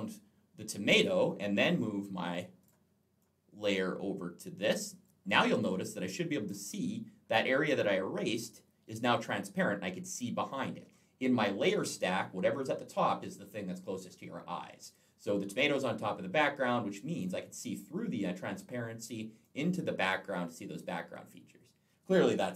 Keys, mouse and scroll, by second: 2.4 click, 3.0 click, 16.6 click, 19.2 click, 22.4 Delete.